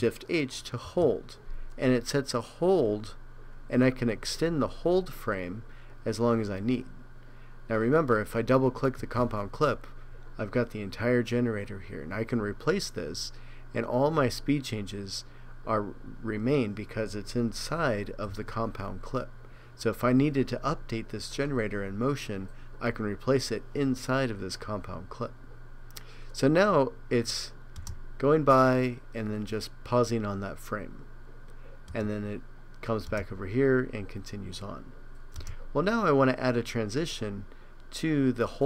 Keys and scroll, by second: 0.9 shift+h, 18.3 super+r.